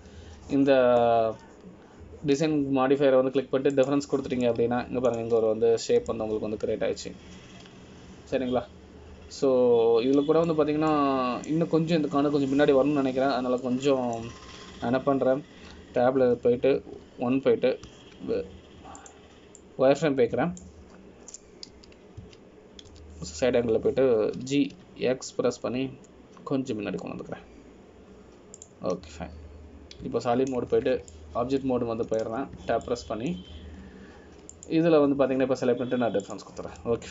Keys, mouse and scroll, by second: 0.0 scroll down 1, 0.6 click, 5.9 click, 6.6 middle click, 7.6-8.0 scroll up 6, 8.3 middle click, 13.1 middle click, 15.4 ctrl+z, 15.8 middle click, 18.3 Tab, 19.1 1, 20.0 z, 21.2 click, 21.8 click, 23.9 KP_1, 24.4 KP_3, 25.1 KP_1, 26.5 g, 32.9 Tab, 33.2 scroll down 1, 33.3 middle click, 34.5-35.2 scroll down 2, 35.0 shift+middle click, 36.0 scroll down 1, 36.7 click.